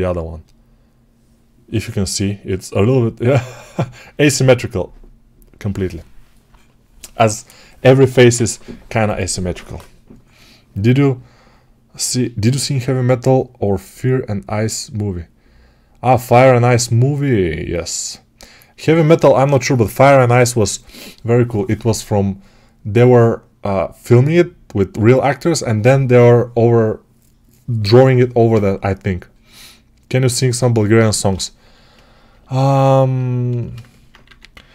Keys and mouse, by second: 34.1 2, 34.5 1.